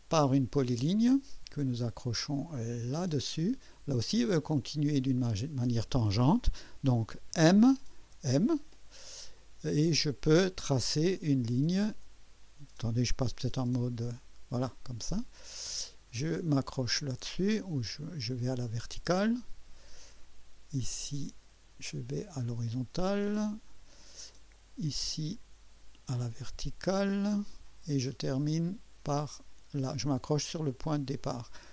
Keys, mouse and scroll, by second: 1.0 click, 3.0 click, 7.3 m, 8.0 m, 11.3 scroll up 2, 13.6 2, 18.8 click, 23.3 click, 27.3 click, 30.7 click.